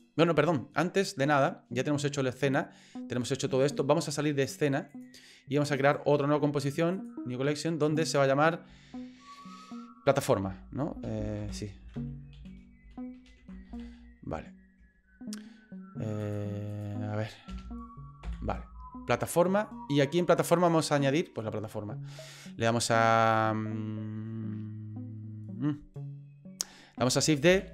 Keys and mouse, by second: 5.8-7.1 right drag, 7.9 click, 8.0-19.3 drag, 20.6 click, 22.9 right click, 27.5 shift+d.